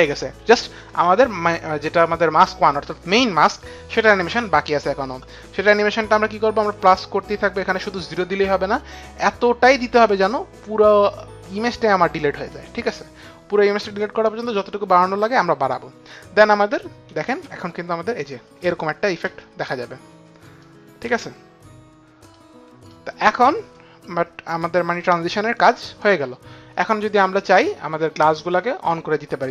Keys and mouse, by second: 7.5 click, 17.0 click, 17.7 space, 19.3 click, 19.7 space, 21.0 click, 21.6 space, 22.9 click, 22.9 space, 25.0 click, 25.0 space.